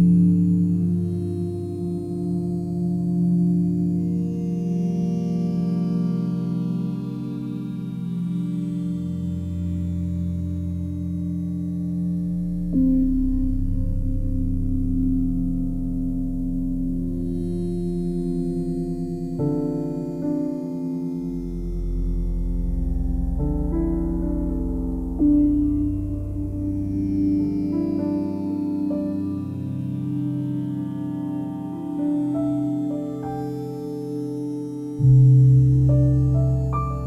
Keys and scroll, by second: 4.6 c.